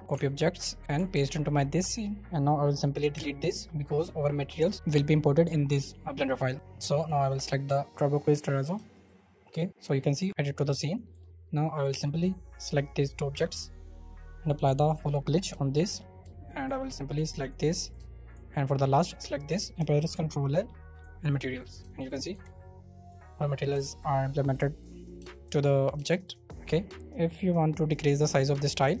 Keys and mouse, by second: 0.9 ctrl+middle click, 1.1 ctrl+v, 3.1 Delete, 4.7-7.0 shift+middle drag, 8.7 shift+middle click, 10.3-11.7 shift+middle drag, 12.0-12.3 middle drag, 12.6-13.7 middle drag, 14.5 middle click, 15.5 shift+middle click, 16.2 shift+middle click, 16.8 right click, 17.2 shift+middle click, 17.9 shift+middle click, 19.7 ctrl+middle click, 19.9 ctrl+l, 21.8 shift+middle click, 22.3 KP_0, 23.7 shift+middle click, 24.5 shift+middle click, 25.2 shift+middle click, 25.9 shift+middle click, 27.7-29.0 drag.